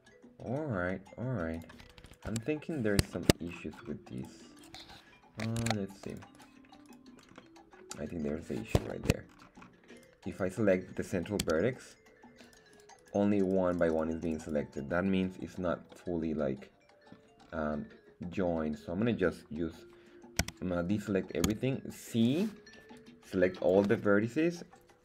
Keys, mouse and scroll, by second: 1.5 click, 2.1 right click, 2.3 Tab, 2.7 scroll down 1, 3.1 shift+middle click, 3.4 scroll up 2, 4.2 right click, 4.2 scroll up 1, 4.6 right click, 5.6 ctrl+Tab, 6.3 right click, 6.8 right click, 7.3 middle click, 8.2-8.8 scroll up 2, 8.8 shift+middle click, 9.3-10.0 scroll up 2, 10.0 right click, 10.3 right click, 11.4 z, 11.8 right click, 12.4 right click, 12.7 right click, 13.0 right click, 13.4 right click, 13.7 right click, 13.9 right click, 14.2 right click, 14.4 right click, 15.9-17.1 middle drag, 17.3 scroll up 1, 18.3 middle click, 18.3-18.6 scroll up 1, 20.4 a, 21.4 c, 23.8 Escape.